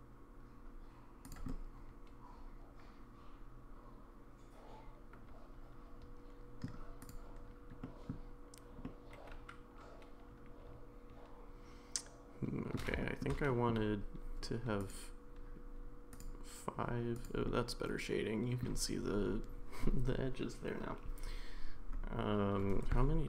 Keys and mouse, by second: 1.5-6.7 middle drag, 7.8 middle drag, 8.8-12.7 middle drag, 13.0 shift+middle drag, 13.5 middle drag, 14.8 click, 16.1 click, 17.1 click, 17.4-18.6 middle drag.